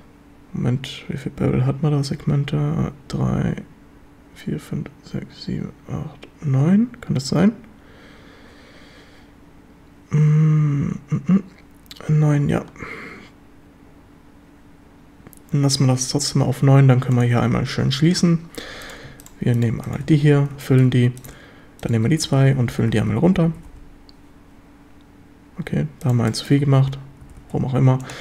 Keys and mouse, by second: 17.2 drag, 18.8 right drag, 20.2 f, 20.2 a, 20.7 shift+drag, 22.1-23.5 typing, 26.3 shift+drag, 27.2-28.2 typing, 28.1 click.